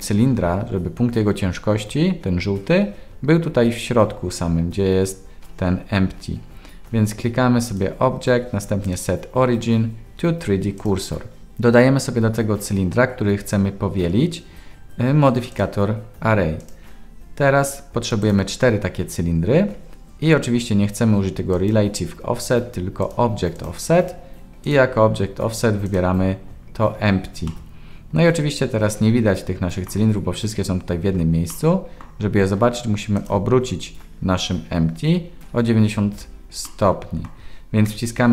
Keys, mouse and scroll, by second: 7.7-10.8 drag, 15.6-16.7 drag, 18.2 click, 21.5 click, 23.0 click, 23.5 click, 27.4-29.8 middle drag, 31.5-32.0 middle drag, 33.1 click, 36.7-37.2 middle drag.